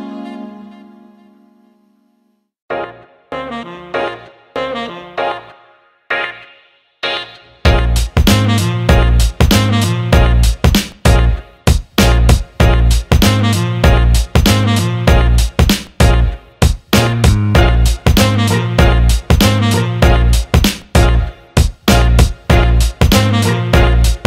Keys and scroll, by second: 3.0 Return, 21.5 Up, 21.6 Right, 21.9 Left, 22.4 Right, 22.6 Up.